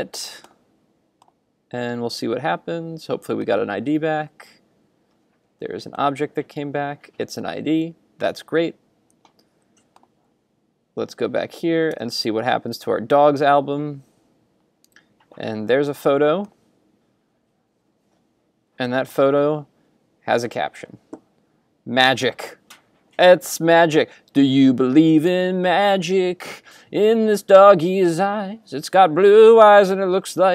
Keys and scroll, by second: 12.0 super+r.